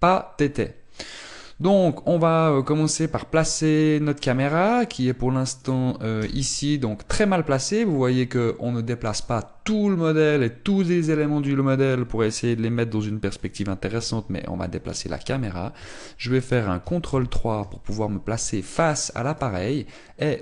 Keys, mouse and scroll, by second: 2.0 click, 4.3 middle click, 5.0-5.4 scroll down 5, 5.5 scroll up 2, 6.3 right click, 6.9 KP_0, 14.1 middle click, 17.8 ctrl+KP_3, 19.5-20.1 scroll up 2, 19.9 shift+middle click.